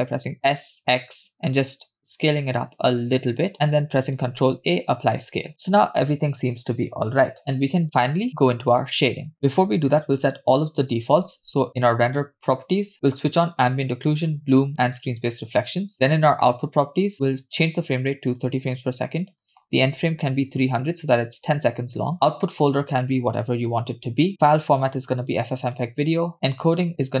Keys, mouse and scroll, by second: 4.2 ctrl+a, 11.7 click, 14.2 click, 14.9 click, 15.1 click, 17.3 click, 18.3 click, 20.7 click, 20.9 0, 22.4 scroll down 3, 23.1-24.7 drag, 24.3 /, 24.9-25.9 drag, 26.5 click, 26.5-27.2 scroll down 1.